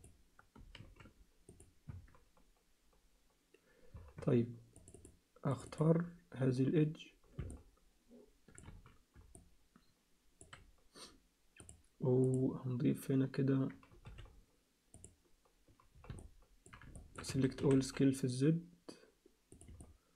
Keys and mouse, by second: 0.8 shift+s, 1.9 Tab, 4.2 Tab, 4.7 click, 5.0 click, 5.7 click, 7.5-8.6 alt+middle drag, 8.7 z, 9.3-10.4 alt+middle drag, 11.6-13.3 drag, 14.0 t, 16.3 alt+middle click, 17.0 shift+middle click, 17.3 a, 17.6 s, 19.8 alt+middle click.